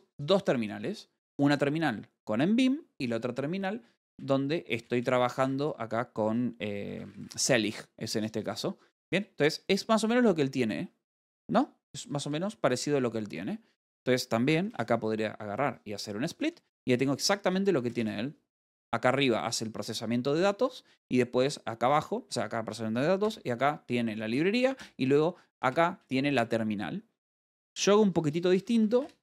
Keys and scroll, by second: 4.5-5.8 typing, 8.4-10.3 typing, 12.7-13.8 typing, 16.8-19.6 typing, 23.7 j, 25.2 l, 28.9-29.2 typing.